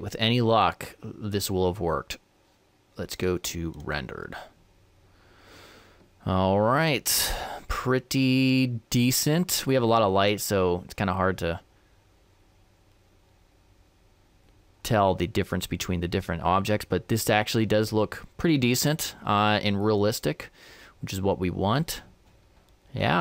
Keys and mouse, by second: 2.9-4.5 drag, 10.7-12.5 middle drag, 13.0-16.8 middle drag, 20.3-22.1 middle drag, 22.3 middle click.